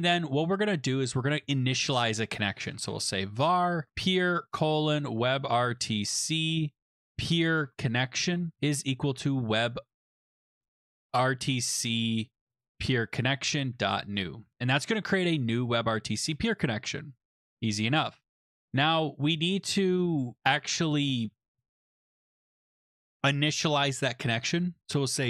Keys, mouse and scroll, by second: 2.4-11.4 typing, 7.6 Tab, 12.5 Down, 12.6 Down, 12.9 Tab, 13.3-14.9 typing, 17.5 click, 18.6 click, 19.3 Left, 19.5 Left, 19.7 Left, 19.9 Left, 20.1 Right, 20.3 Right, 20.4 Right, 20.6 Right, 21.1 Left, 21.2 Left, 21.4 Left, 21.6 Left, 21.6 Return, 21.7 Tab, 24.6-25.2 typing.